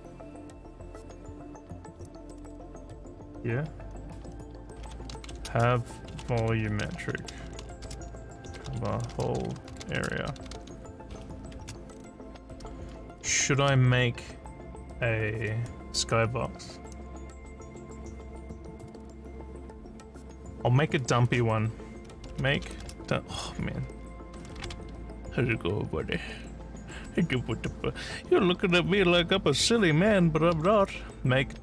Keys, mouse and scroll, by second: 4.6-5.7 typing, 6.9-11.1 typing, 22.1-23.1 typing, 24.4 d.